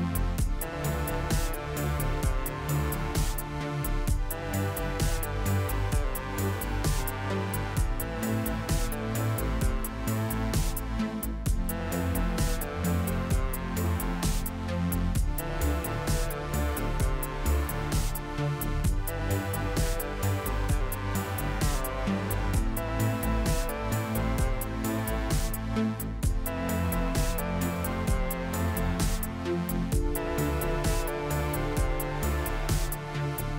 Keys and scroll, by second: 5.8 s, 8.4 KP_Divide, 9.0 Tab, 9.9 KP_Divide, 10.4 Tab, 15.7 a, 16.3 a, 16.9 u, 22.8 Tab, 25.8 Tab, 26.8 a, 29.4 a.